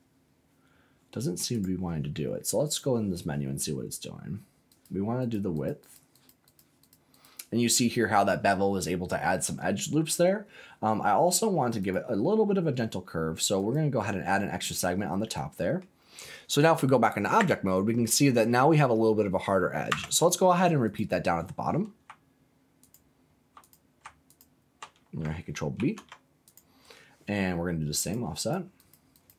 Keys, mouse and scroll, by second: 1.5 click, 2.6 click, 4.6 click, 5.1 click, 5.5 click, 5.8 click, 6.1 click, 6.4 click, 6.7 click, 7.1 click, 11.8 click, 13.5 click, 15.2 middle click, 17.3 Tab, 19.8 Tab, 20.8 click, 22.8 alt+click, 23.6 click, 24.2 alt+click, 25.7 ctrl+b, 26.4 click, 27.9 click, 28.3 click, 28.7 click, 29.1 click.